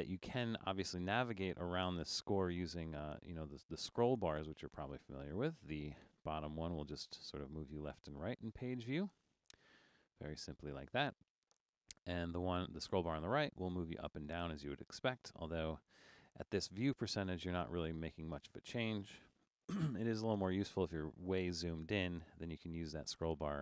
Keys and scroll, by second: 19.8 super+=, 20.1 super+=, 20.6 super+=, 21.1 super+=.